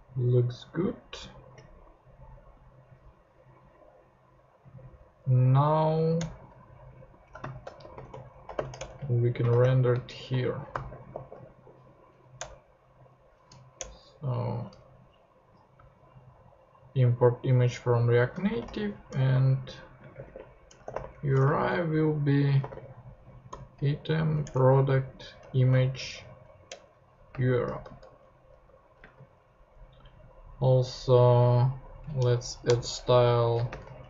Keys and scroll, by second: 0.7 ctrl+Tab, 5.9 Up, 6.2 Return, 7.2-11.7 typing, 12.4 Return, 13.8 Return, 18.4-23.5 typing, 24.4 Return, 25.4 Return, 26.7 Return, 27.3 space, 27.8 super+Right, 29.0 space, 32.4 Down, 32.6 Return, 33.4-34.0 typing.